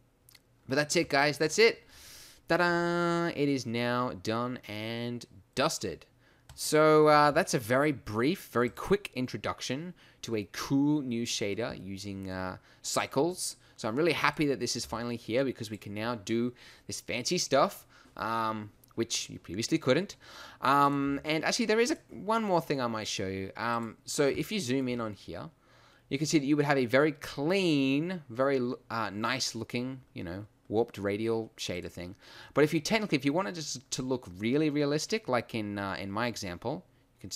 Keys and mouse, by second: 3.3 middle click, 9.3 g, 10.5 middle click, 14.8 g, 15.7 click, 22.3 g, 32.2-33.5 right drag.